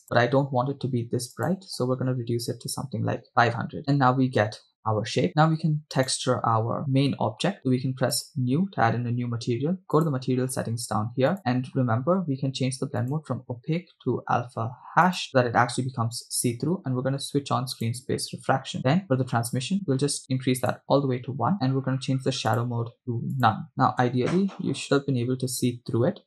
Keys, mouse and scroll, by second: 0.0 click, 1.4-3.5 drag, 3.5 0, 6.2 right click, 8.2 click, 10.2 click, 11.4-12.0 scroll down 7, 13.7-15.3 drag, 16.6-17.0 scroll down 2, 18.0 click, 19.0-19.4 scroll up 3, 19.9 click, 21.5 shift+middle click, 22.5-23.6 drag, 23.7 middle click, 24.2 KP_0.